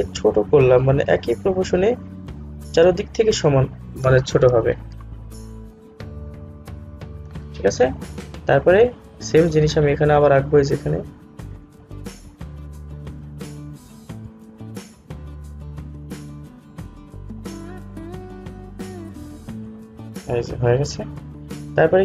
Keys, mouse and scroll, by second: 21.2-21.6 scroll down 1.